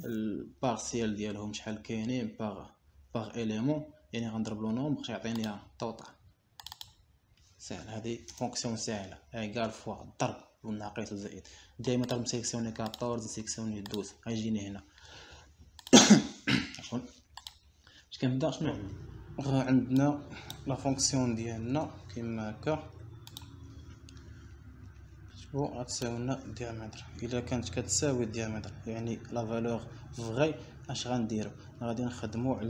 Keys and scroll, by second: 9.6 Return, 24.3 BackSpace, 26.8 =, 30.5 ..